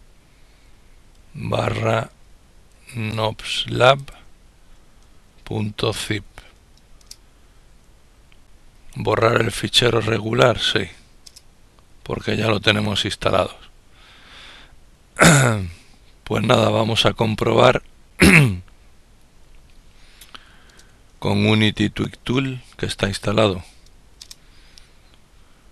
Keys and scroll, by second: 0.5-6.4 typing, 10.5 typing, 22.0-23.0 typing, 23.5 ctrl+Return.